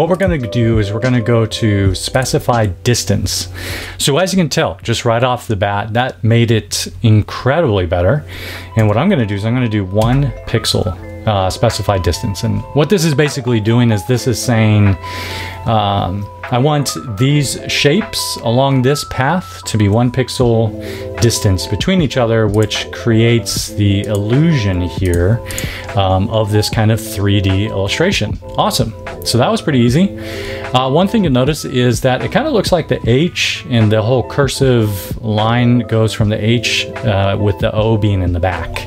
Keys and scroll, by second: 8.7 1, 9.9 Tab.